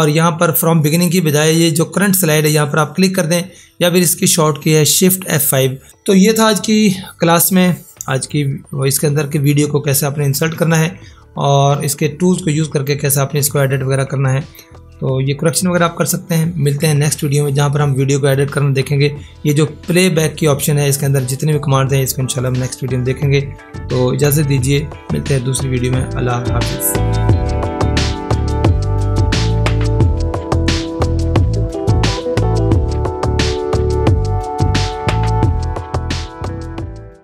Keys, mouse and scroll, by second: 11.8 click, 20.8 click.